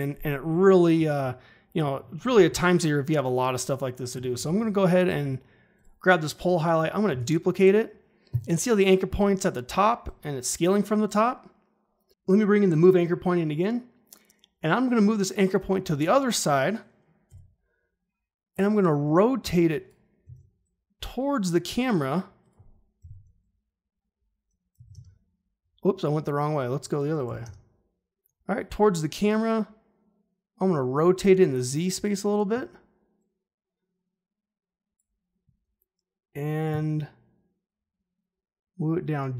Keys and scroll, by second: 7.1 ctrl+d, 17.2 r, 20.2 ctrl+z, 23.0 KP_Subtract, 24.7 9, 24.9 Return, 27.2 9, 27.4 Return.